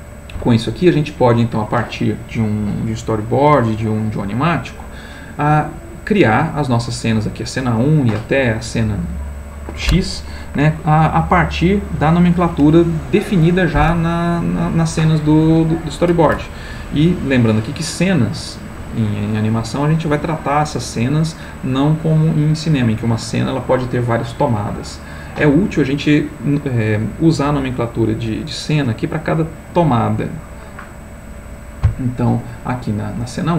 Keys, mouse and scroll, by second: 6.3 click, 32.4 click.